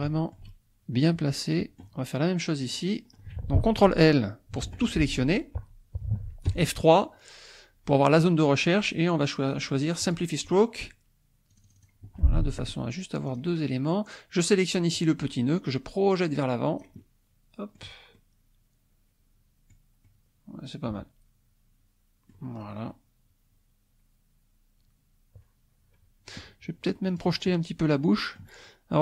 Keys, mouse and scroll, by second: 0.1-2.0 shift+drag, 2.7 click, 2.9-4.6 scroll up 2, 4.6-4.9 ctrl+scroll up 1, 4.7 ctrl+l, 6.5 F3, 10.2 click, 11.5 click, 12.2 middle click, 13.4 click, 15.8-17.9 drag, 18.1-22.5 middle drag, 22.9-26.5 middle drag, 27.1 click, 27.5-28.5 middle drag.